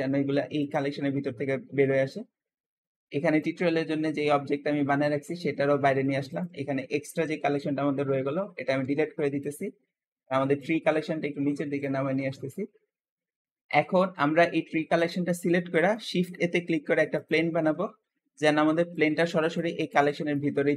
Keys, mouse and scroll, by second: 0.5 click, 2.0 click, 6.1 click, 8.7 Delete, 9.3 click, 10.4 click, 15.2-16.0 shift+middle drag, 16.0 shift+a.